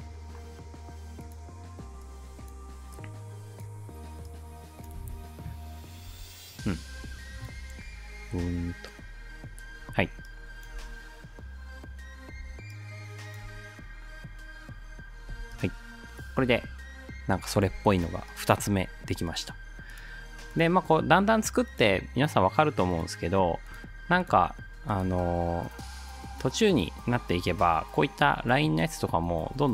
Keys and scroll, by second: 5.0 space, 6.1 space, 7.6 space, 9.8 space, 10.8 space, 12.4 space, 15.3 space, 16.4 ctrl+s.